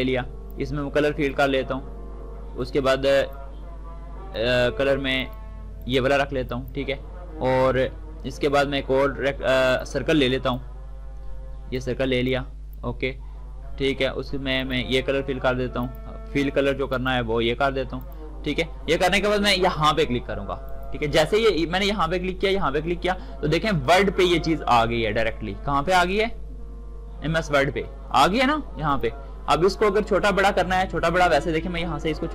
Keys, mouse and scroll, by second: 9.4-14.3 drag, 20.4 click, 25.7-28.6 drag.